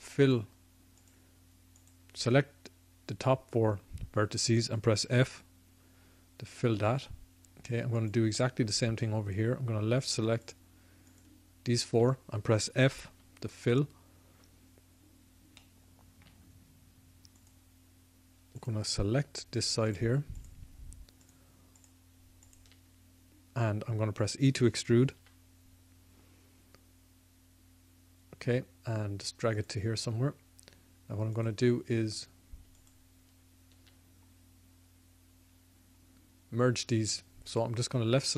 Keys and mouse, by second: 5.1 f, 7.9-13.2 drag, 13.2 f, 14.9 click, 15.6 middle click, 15.7-25.2 drag, 25.2 e, 31.3-36.0 drag, 37.5-38.3 drag.